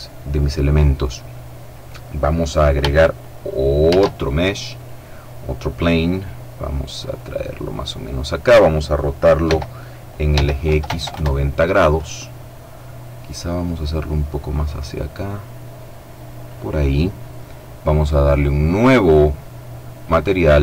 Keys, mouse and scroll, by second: 3.3 shift+a, 4.2 click, 5.7-7.8 drag, 8.9 r, 9.8 x, 10.1 KP_9, 10.3 KP_0, 13.2-16.4 drag, 17.3 click, 19.5 click.